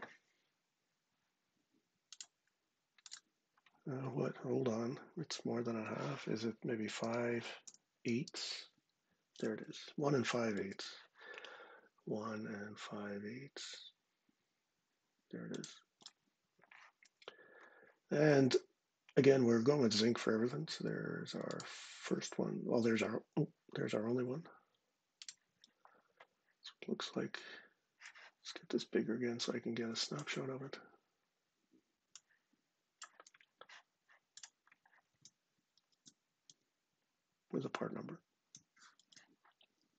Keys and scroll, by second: 6.7 5, 7.4 Return, 7.8 8, 8.0 /, 10.3 super+Tab, 12.0-12.8 typing, 35.4 shift+super+4, 36.2 ↻, 38.7 shift+super+4.